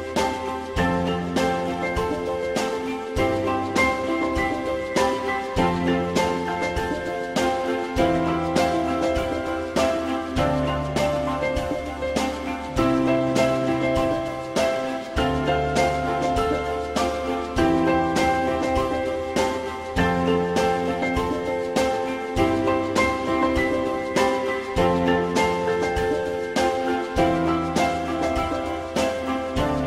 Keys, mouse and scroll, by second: 6.4 alt+middle click, 9.3 alt+middle click, 10.7 alt+middle click, 15.9 alt+middle click, 18.1 ctrl+click, 18.6-19.7 typing, 26.4 alt+x.